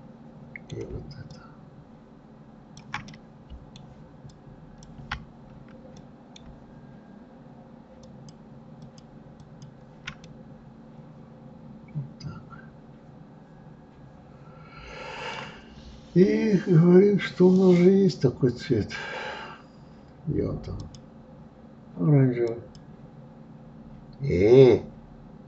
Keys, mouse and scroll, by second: 1.3-3.1 shift+drag, 3.1-4.3 middle drag, 4.3-6.0 ctrl+drag, 6.0-8.0 middle drag, 8.0-9.1 shift+drag, 9.4 shift+click, 10.2-13.2 middle drag, 17.5 click, 20.8-23.8 drag.